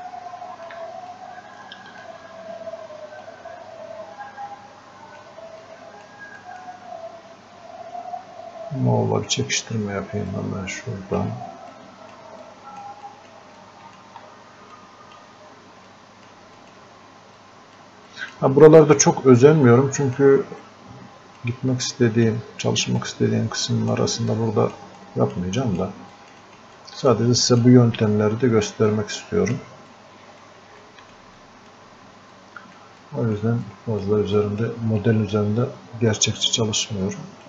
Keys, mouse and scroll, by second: 0.0 alt+click, 1.2-3.3 drag, 3.3-5.7 drag, 5.7 click, 6.4 click, 10.4-11.8 drag, 11.8 click, 12.5 click, 13.1 click, 13.9 shift+click, 14.8 click, 15.9-29.9 drag, 29.9 click, 30.8 alt+click, 31.4 alt+click, 32.4 click, 33.0 click, 33.7-37.4 drag.